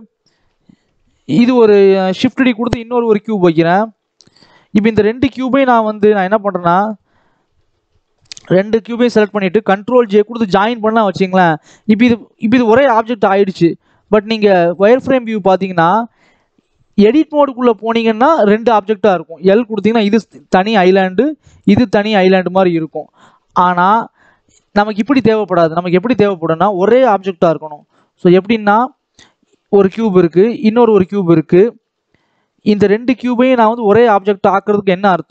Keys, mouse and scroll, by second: 0.6 g, 2.4 shift+d, 3.6 scroll down 3, 3.7 middle click, 4.3 scroll up 2, 4.5-5.7 middle drag, 5.7 g, 7.0-8.2 middle drag, 8.2 click, 8.8 shift+click, 9.9 ctrl+j, 10.5 click, 11.5 click, 12.2 g, 13.8 click, 14.8 click, 15.2 middle click, 15.8 scroll up 1, 16.0 middle click, 16.4 click, 17.6-18.9 drag, 19.7 l, 20.2 l, 20.9 click, 21.3 l, 21.8 l, 22.4 click, 22.7 scroll down 2, 23.2 Tab, 24.2 x, 25.1 scroll down 1, 25.8 shift+a, 27.3 g, 28.5 scroll up 1, 28.8 shift+middle click, 29.1-29.4 scroll up 1, 29.4 scroll down 1, 29.6 middle click, 30.2 shift+d, 31.8 middle click, 32.2 scroll up 1, 32.3 middle click, 33.3 scroll up 1, 33.4 middle click, 34.1-34.8 scroll down 1, 34.8-35.3 scroll down 1.